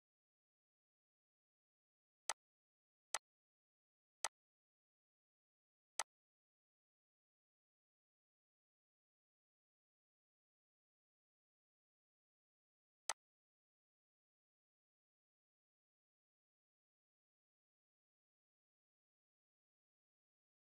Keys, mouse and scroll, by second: 0.7 right click, 2.3-12.2 drag, 13.1 click.